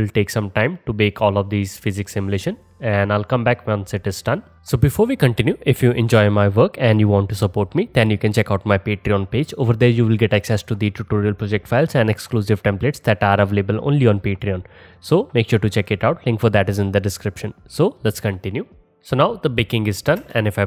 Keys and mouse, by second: 18.3-20.6 drag, 20.3 space.